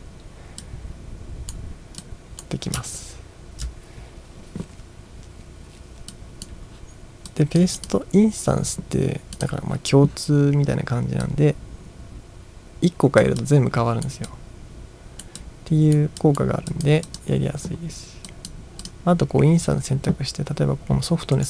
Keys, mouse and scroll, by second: 0.6-1.5 drag, 2.0 click, 3.0 ctrl+scroll down 1, 6.2-6.5 drag, 7.3-7.6 drag, 7.8 click, 9.4 click, 11.3-13.2 drag, 13.4-14.1 drag, 14.3-15.2 drag, 15.4-16.0 drag, 16.2 click, 16.7 click, 17.1 click, 18.3 drag, 18.8-19.6 drag, 21.3 right click.